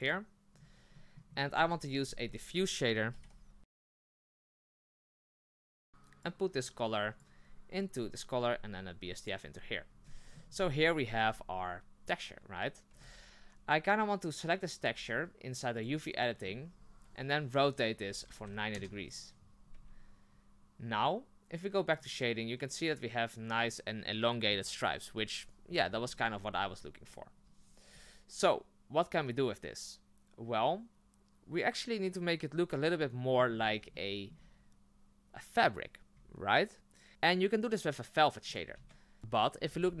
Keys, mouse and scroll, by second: 0.0 click, 6.2 click, 9.3 click, 10.0 shift+middle click, 10.4 scroll down 2, 12.9 Tab, 13.5 a, 14.8 Tab, 15.8 click, 16.7 a, 18.0 r, 19.7 Tab, 22.0 click, 22.6 scroll up 1, 33.1-33.5 middle drag, 33.5 scroll up 4, 33.9-40.0 shift+middle drag.